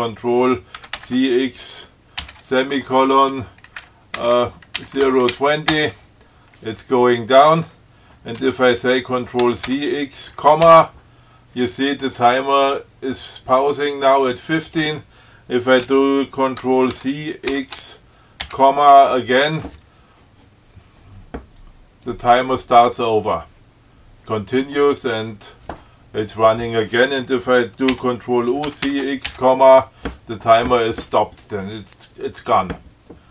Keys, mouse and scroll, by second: 1.1 ctrl+c, 1.3 ctrl+x, 2.5 shift+,, 3.7-6.0 typing, 9.7 ctrl+c, 10.0 ctrl+x, 10.9 ,, 17.3 ctrl+c, 17.8 ctrl+x, 18.8 ,, 28.2 ctrl+u, 29.0 ctrl+c, 29.1 ctrl+x, 29.6 ctrl+,.